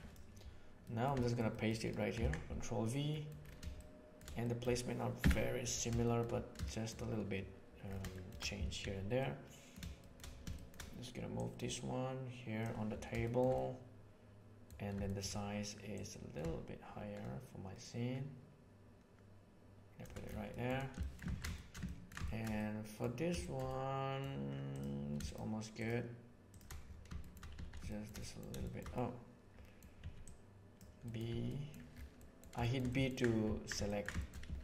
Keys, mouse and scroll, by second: 0.8 middle click, 1.2 ctrl+middle drag, 1.6 ctrl+middle click, 2.5 ctrl+v, 3.1 middle click, 3.7-4.1 shift+middle drag, 4.4 middle click, 4.5 scroll down 1, 5.2 KP_7, 6.0 shift+middle click, 6.7 shift+middle click, 8.1 shift+middle click, 8.8 b, 10.0 shift+middle click, 10.5 shift+middle drag, 11.3 right click, 11.7 click, 13.2 shift+middle drag, 13.5-14.6 middle drag, 15.0 shift+middle drag, 15.9-20.0 middle drag, 20.5 middle click, 21.0 shift+middle click, 21.3 alt+a, 21.5-22.1 shift+middle drag, 22.2 shift+middle drag, 22.5-23.1 middle drag, 23.4 shift+middle drag, 23.7-24.2 middle drag, 25.7 shift+middle click, 27.2 shift+middle click, 27.5 z, 27.9 shift+middle click, 28.2 middle click, 28.6 shift+middle click, 28.9-29.8 middle drag, 30.0 b, 31.0 middle click, 31.3 b, 33.8 ctrl+middle click, 34.1 middle click, 34.5 z.